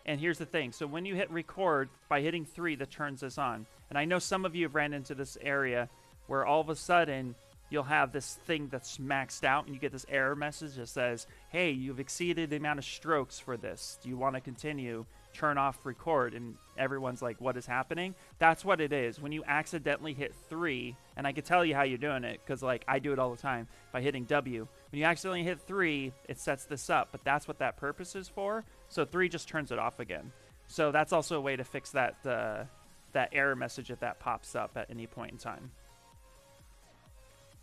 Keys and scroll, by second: 1.1 3, 4.1 shift+m, 20.2 3, 28.1 3, 35.4 b.